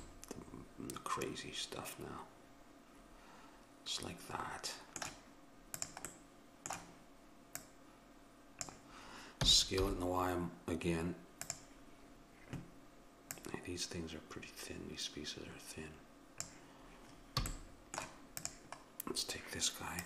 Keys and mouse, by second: 0.4 middle click, 5.8-9.4 drag, 6.1-7.6 middle drag, 6.1-7.6 right drag, 9.4 s, 13.3-15.2 drag, 17.5 a, 17.7 middle click, 18.4-20.0 drag.